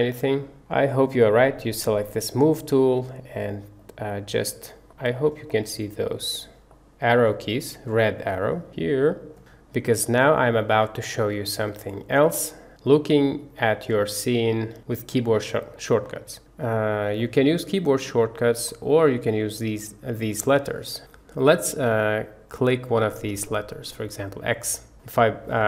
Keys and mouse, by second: 1.8 click, 4.0 click, 4.8-5.3 drag, 6.7-7.3 drag, 8.3-9.4 drag, 10.1-11.3 drag, 12.6 click, 17.6 click, 24.2 click.